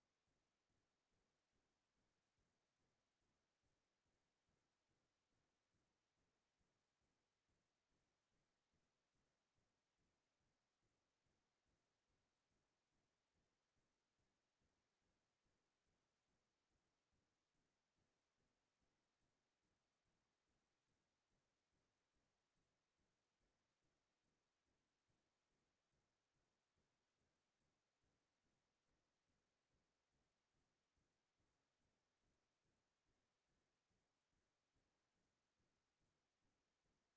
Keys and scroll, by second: 0.0-3.4 typing, 7.8 BackSpace, 8.0 BackSpace, 8.8 g, 9.2 Return, 23.3 ctrl+v, 25.8 ctrl+y, 30.2 ctrl+t.